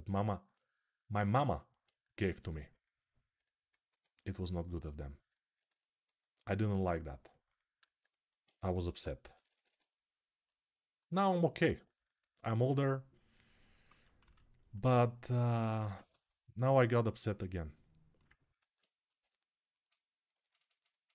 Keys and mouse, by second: 1.0-5.9 ctrl+alt+right drag, 3.6 q, 5.9-11.7 alt+drag, 7.6 alt+q, 8.5 g, 9.0 [, 9.1 [, 12.1-14.0 drag, 14.0 6, 18.9 g, 21.0 alt+q.